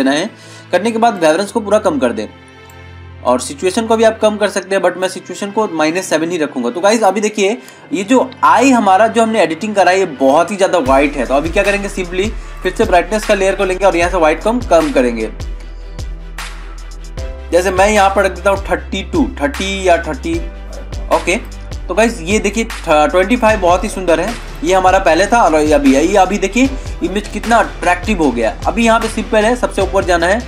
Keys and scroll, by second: 8.6 ctrl+-, 9.8 ctrl+=, 26.6 ctrl+-, 27.6 ctrl+=.